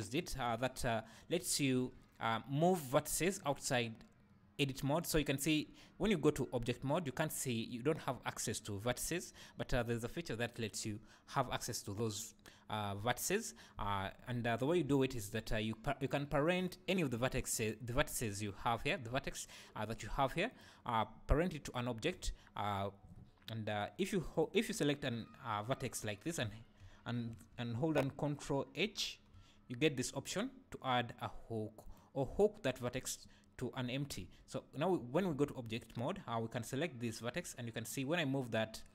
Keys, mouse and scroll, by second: 1.7 Tab, 14.9 Tab, 16.1 click, 16.6 click, 17.1 click, 17.7 click, 20.5 click, 24.3 click, 28.8 ctrl+h, 34.2 Tab, 35.3 alt+a, 35.7 click, 37.4 g.